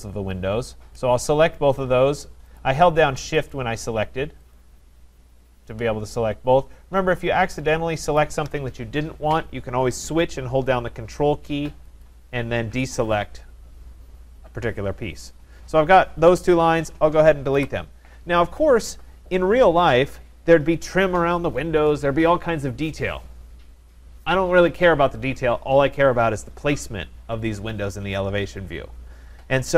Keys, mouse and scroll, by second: 2.6 click, 3.5 click, 4.6 shift+click, 8.2 click, 12.0 ctrl+click, 17.6 Delete, 19.2 scroll, 19.3 middle click, 28.9 middle click, 29.0 middle click.